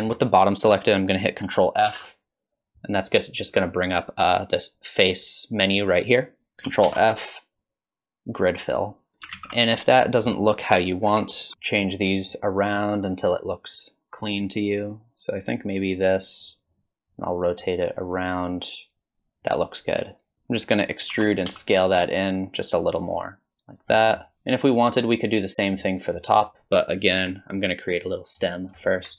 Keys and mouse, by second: 0.0 shift+middle click, 1.9 ctrl+f, 6.8 ctrl+f, 9.3 alt+z, 10.0 middle click, 11.1 ctrl+KP_7, 11.5 click, 12.6 click, 13.1 click, 16.4-17.6 drag, 18.0 click, 21.1 e, 24.0 middle click, 24.8 alt+click, 25.8 middle click, 27.2 KP_1, 27.9 middle click, 28.8 shift+middle click.